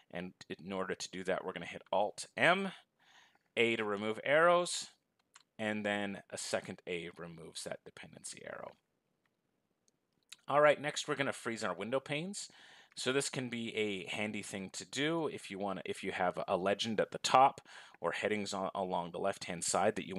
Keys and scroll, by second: 2.1 alt+a.